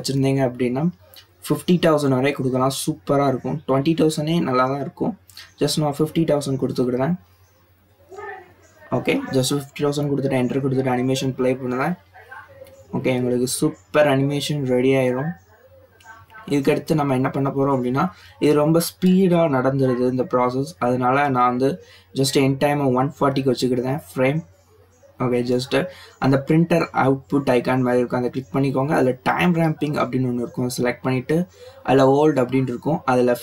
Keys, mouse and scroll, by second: 3.4 click, 5.2-6.4 drag, 6.4 BackSpace, 6.6 BackSpace, 8.0 0, 8.5 0, 12.2 click, 16.1-16.6 drag, 18.2 click, 19.8-21.0 drag, 21.0 BackSpace, 21.1 BackSpace, 27.2 click, 29.0 click, 29.8-32.0 drag, 32.0 BackSpace, 32.1 BackSpace.